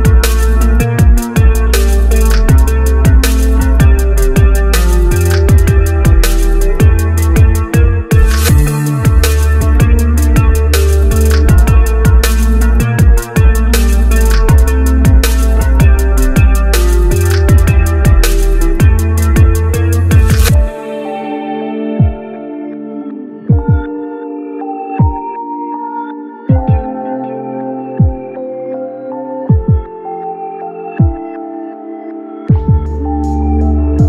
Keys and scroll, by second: 15.7 shift+space.